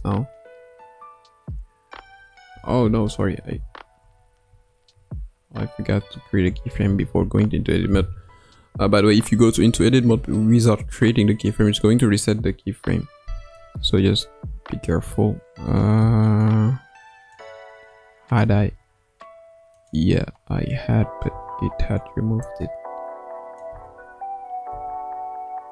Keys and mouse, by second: 1.9 Tab, 2.5 Tab, 3.6 ctrl+z, 4.0 ctrl+z, 4.4 ctrl+z, 6.6 i, 13.6-17.3 drag, 18.4 r, 21.2 i, 22.4-23.6 drag, 23.7 space, 24.6 space.